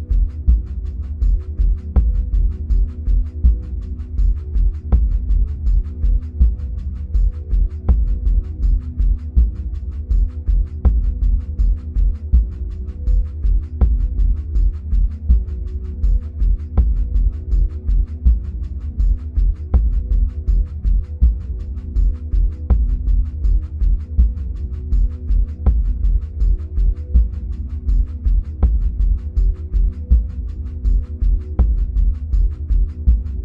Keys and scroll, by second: 2.1 ctrl+v, 9.6 Up, 10.7 ctrl+[, 13.0 Left, 13.5 Down, 15.8 ctrl+-, 16.1 ctrl+0, 20.2 ctrl+c, 20.4 ctrl+v, 23.7 Delete.